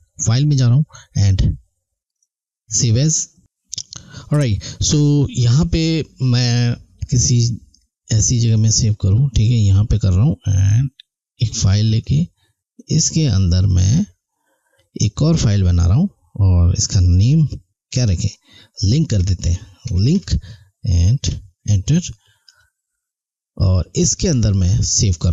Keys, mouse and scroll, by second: 0.2 click, 5.3 click, 8.4 click, 9.6 Right, 11.3 click, 13.6 Right, 15.3 click, 19.2-20.6 typing, 22.5 click.